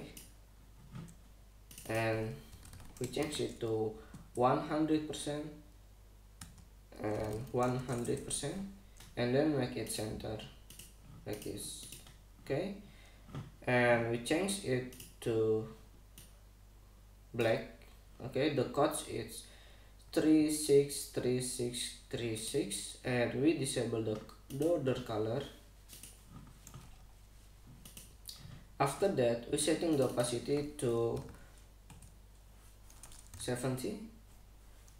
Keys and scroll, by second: 0.0 r, 2.9-3.9 typing, 4.8 shift+Return, 7.1 Tab, 7.6-8.9 typing, 9.5 Return, 31.8 5, 32.5 Return, 33.8-34.9 typing.